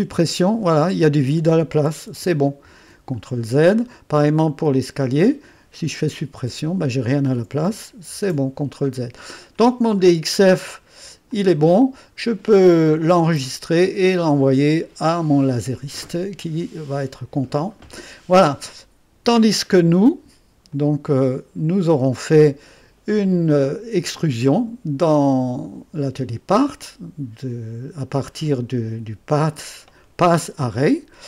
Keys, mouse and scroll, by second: 0.0 Delete, 2.7 ctrl+z, 3.3-4.6 middle drag, 4.7-6.3 drag, 6.3 Delete, 8.1 ctrl+z, 11.3-12.9 drag, 13.2 ctrl+s, 19.3 click, 20.7-22.2 drag, 24.1 click, 28.2 click.